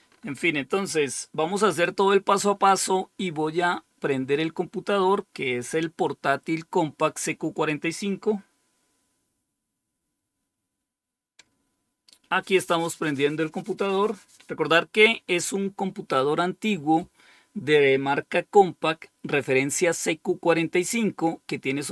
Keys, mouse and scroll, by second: 0.0 scroll up 2, 0.6-1.3 scroll up 2, 2.3-3.1 scroll up 2.